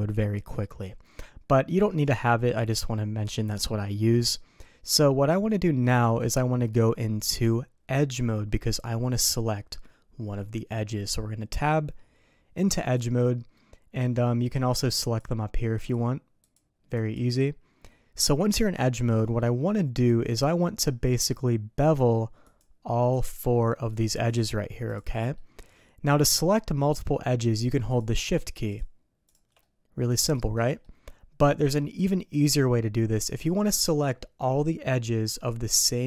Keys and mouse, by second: 15.0 click, 15.7 click, 16.4 click, 16.9 click, 19.4 middle click, 20.8 middle click, 22.5 click, 23.1 click, 23.5 middle click, 24.2 click, 24.9 click, 25.3 middle click, 27.9 click, 28.7 shift+click, 29.2 shift+click, 29.6 middle click, 30.8-31.8 middle drag.